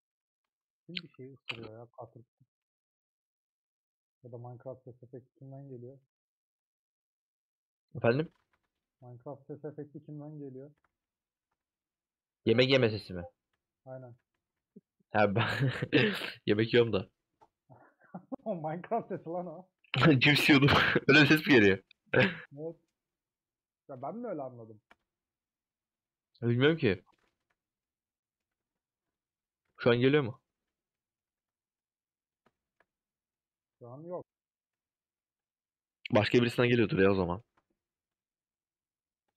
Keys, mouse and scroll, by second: 8.6-12.2 drag, 12.2 alt+z, 12.9 alt+click, 20.2-21.3 middle drag, 21.3 click, 22.1 middle click, 22.8 scroll down 1, 23.0-24.0 scroll up 3, 24.0-26.3 shift+middle drag, 26.3 scroll up 1, 26.3-27.0 scroll down 1, 27.0 middle click, 27.5 1, 27.8 middle click, 28.7 2, 30.5-30.9 scroll down 1, 30.9 middle click, 31.4 3, 32.5-35.6 shift+middle drag, 35.6 alt+click, 36.8 alt+z, 37.2-38.3 middle drag, 38.3 alt+shift+click.